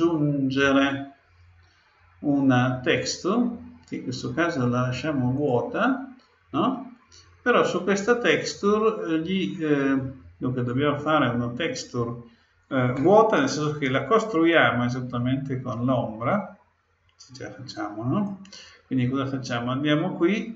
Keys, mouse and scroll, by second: 0.6-2.4 drag, 2.5 click, 17.7-19.6 drag.